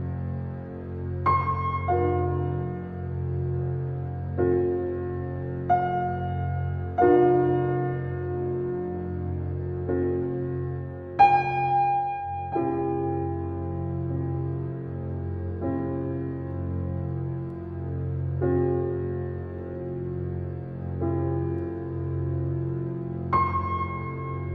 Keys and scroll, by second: 4.4 4, 4.6 5, 4.8 Return, 15.2 shift+space.